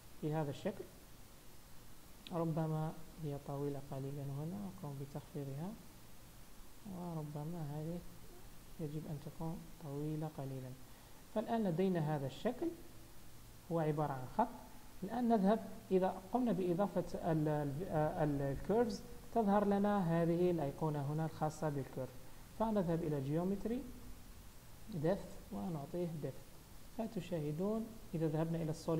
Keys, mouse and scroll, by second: 0.3-0.9 scroll up 2, 0.9 Tab, 0.9-1.5 scroll up 1, 1.6 Tab, 2.7 Tab, 3.1 Tab, 3.5 click, 4.3 g, 6.1 Tab, 6.6 Tab, 7.0 click, 7.4 Tab, 8.0 Tab, 8.8 g, 10.5 Tab, 10.8-11.2 scroll down 3, 11.2-11.6 scroll up 3, 11.5 middle click, 21.1 click, 22.9 click, 23.4-25.5 scroll down 11, 25.7 click, 26.3 click, 26.6 click, 26.8 click, 27.0 click, 27.5 z.